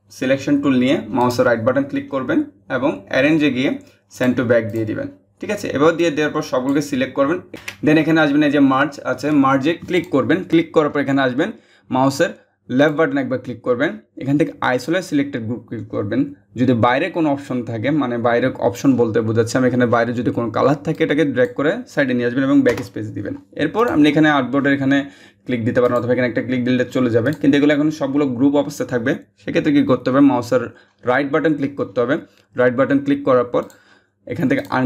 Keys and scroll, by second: 7.6 ctrl+z, 22.3 BackSpace.